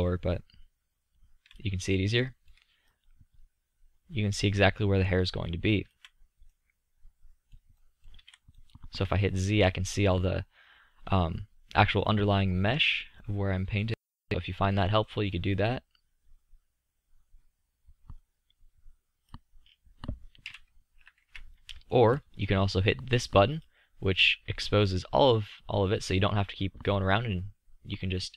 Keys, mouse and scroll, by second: 1.4 middle click, 4.8-6.6 middle drag, 8.1 z, 11.4-13.3 middle drag, 15.9-20.4 middle drag, 20.4 KP_1, 20.9 KP_3, 21.3 KP_5, 27.8 middle click.